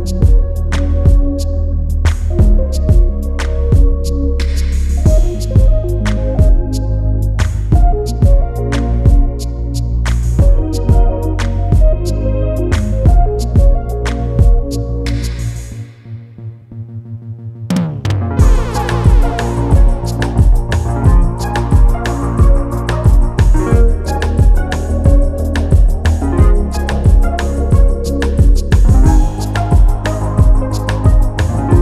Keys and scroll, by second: 22.0 Return.